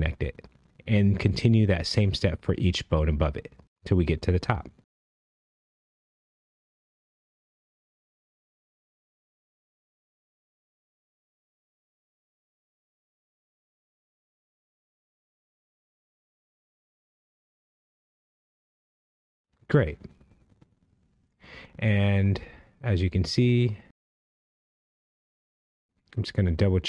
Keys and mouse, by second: 2.5 click, 4.8 click, 5.9 click, 7.1 click, 8.2 click, 9.5 click, 12.5 click, 14.0 click, 14.9 click, 16.3 click, 17.7 click, 19.4 click, 22.2 click, 26.7 click.